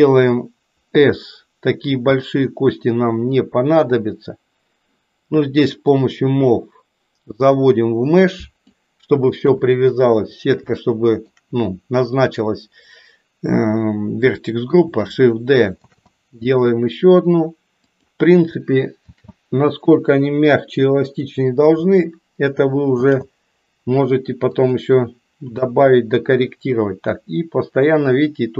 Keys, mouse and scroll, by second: 0.9 s, 5.8-8.6 drag, 9.4 KP_1, 10.8 shift+middle click, 15.9 shift+d, 19.1 shift+d, 22.9 shift+d, 25.4 KP_7, 27.0-28.5 drag.